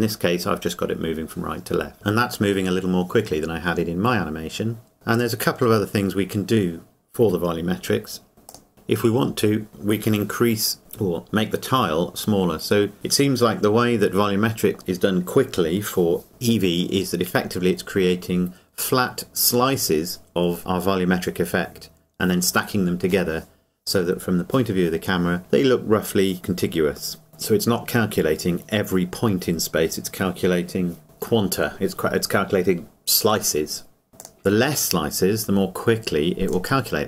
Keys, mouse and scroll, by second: 5.1 click, 8.5 click, 34.2 click.